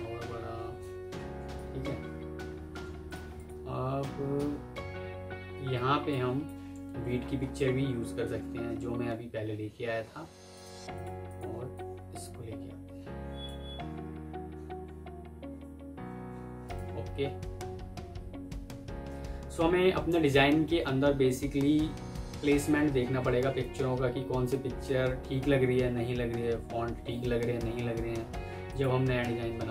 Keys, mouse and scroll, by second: 2.3 F3, 2.8 Escape, 3.2 double click, 5.5 F2, 6.4 Escape, 7.1 alt+scroll up 1, 7.3-7.8 alt+scroll down 1, 8.2 alt+Tab, 10.8 double click, 28.1 F4.